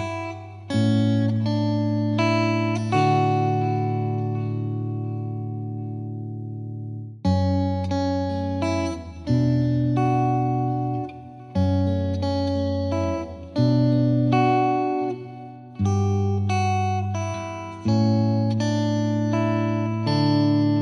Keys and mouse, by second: 0.8 click, 1.8 click, 5.5 click, 11.0 click, 13.4 click, 14.3 click, 16.4 click, 17.3 click, 20.1 click, 20.7 click.